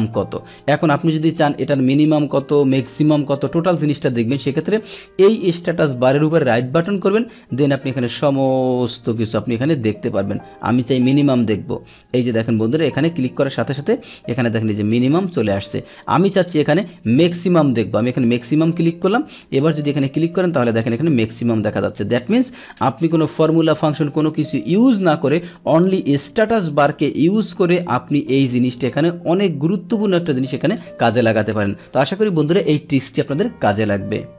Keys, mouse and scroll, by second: 6.1 right click, 11.0 click, 12.4 click, 16.3 right click, 18.2 click, 19.4 click, 25.7 right click, 27.8 click, 28.6 right click, 28.6 click, 30.1 click, 31.2 click.